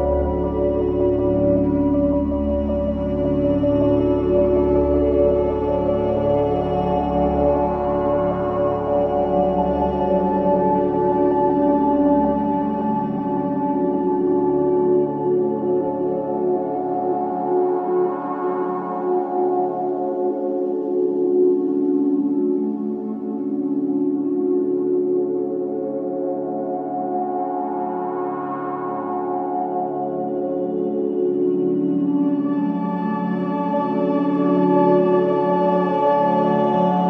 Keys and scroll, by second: 10.4 ctrl+alt+r, 12.1 ctrl+space, 12.8 ctrl+alt+space, 13.1 ctrl+alt+r, 14.2 ], 31.2 space, 32.7 space.